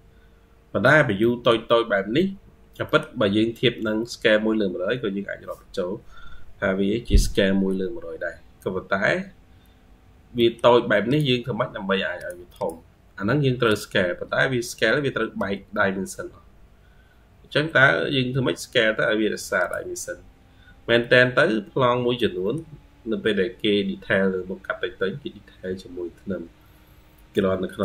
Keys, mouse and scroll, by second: 0.2 m, 0.6 m, 1.0 middle click, 2.3-2.7 scroll down 5, 2.7 middle click, 4.7-6.1 scroll up 3, 8.4-9.7 scroll up 3, 9.8-10.2 scroll down 1, 10.2 middle click, 12.4 double click, 14.3-15.2 scroll up 4, 15.2 Escape, 15.7-16.7 scroll up 1, 18.5-19.8 scroll down 4, 20.5 Escape, 20.9 Escape, 21.1-22.0 scroll up 5, 22.0 middle click, 23.5-24.6 scroll down 2, 24.8-25.8 scroll down 5, 26.3-26.6 scroll up 1.